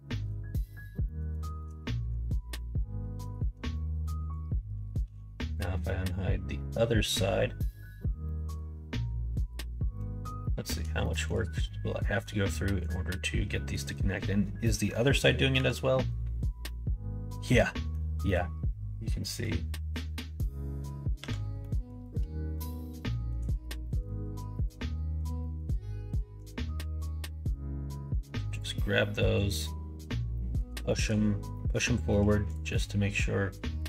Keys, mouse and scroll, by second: 0.0 middle click, 0.5 middle click, 1.0 middle click, 1.4 shift+middle click, 1.8 middle click, 2.4 middle click, 3.2 middle click, 3.7 shift+middle click, 4.2 click, 4.4 middle click, 5.0 alt+h, 5.4 click, 5.7-7.0 middle drag, 8.2 middle click, 8.8-9.9 middle drag, 10.2 middle click, 10.9 shift+middle click, 11.6 middle click, 12.7 click, 13.4 middle click, 15.5 l, 16.7 middle click, 17.7 middle click, 18.2 middle click, 19.2 middle click, 21.1 h, 21.5 middle click, 22.5 click, 22.7 shift+middle click, 23.8 middle click, 24.5 click, 24.9 middle click, 25.3 middle click, 26.4-28.1 drag, 28.4 click, 29.3 click, 30.3 middle click, 30.9 shift+middle click, 31.5 middle click, 31.9 shift+middle click, 32.4 click, 32.6-33.7 middle drag.